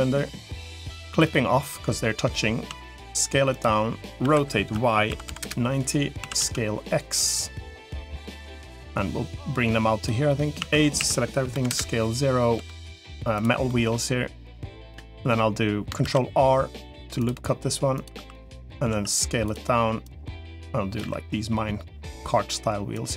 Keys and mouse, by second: 1.1 click, 1.5 middle click, 2.5 s, 4.1 r, 6.1 s, 8.3-9.9 drag, 10.5 a, 10.9 s, 12.5 g, 13.5 middle click, 14.7 middle click, 15.9 ctrl+r, 18.1 3, 18.7 s, 19.9-20.9 drag, 20.9 e, 22.9 click.